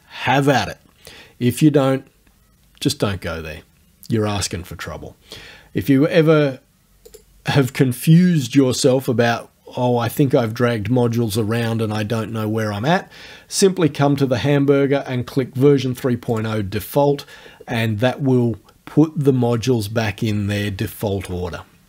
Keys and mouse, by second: 7.1 click, 16.3 click.